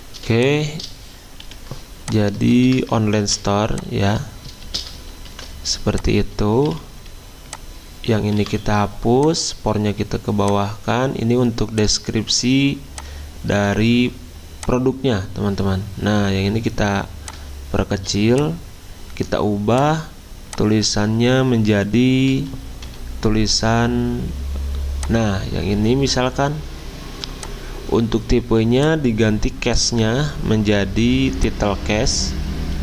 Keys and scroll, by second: 1.5 t, 2.5 ctrl+a, 3.2 ctrl+c, 4.4-5.1 typing, 5.3 ctrl+v, 8.4 Delete, 22.3-22.8 typing.